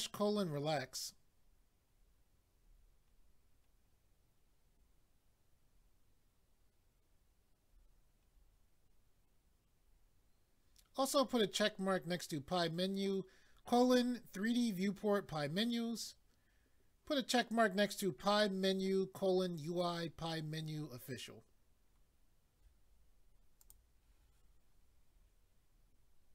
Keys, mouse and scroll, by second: 1.4-1.9 scroll down 1, 1.9-2.6 scroll down 2, 2.6-3.1 scroll down 1, 4.7 scroll down 1, 5.7-6.0 scroll down 1, 7.1 scroll down 1, 7.7-8.2 scroll down 1, 8.2-8.5 scroll down 2, 9.2 scroll down 1, 9.8-10.4 scroll down 1, 23.6 click.